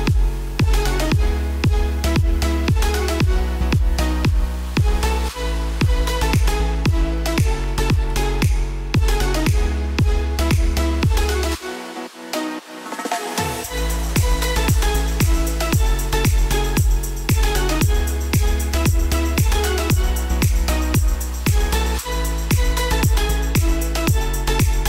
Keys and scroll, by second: 1.4 ctrl+d, 8.1 b, 15.9 Return, 16.5 s, 21.1 b.